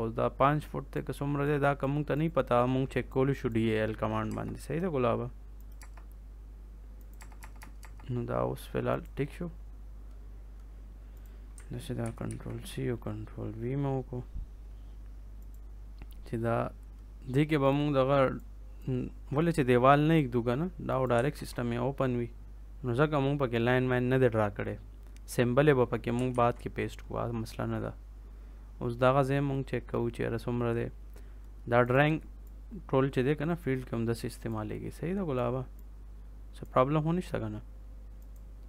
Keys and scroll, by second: 4.2 BackSpace, 5.7 BackSpace, 7.1 BackSpace, 11.9 ctrl+c, 12.2 ctrl+v, 21.3 ctrl+s, 26.2 ctrl+s.